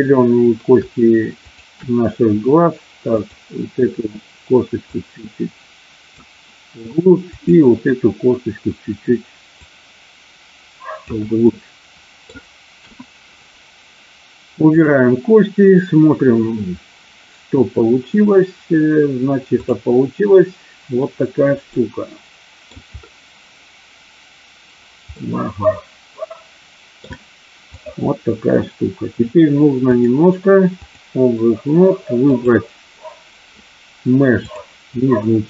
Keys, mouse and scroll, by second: 1.5 shift+click, 5.0-6.2 drag, 7.3 click, 9.6-11.1 drag, 11.5 middle click, 12.8 KP_1, 14.6 click, 21.7-22.7 middle drag, 25.1-27.0 middle drag, 27.6 click, 29.9-30.9 drag, 34.5 click.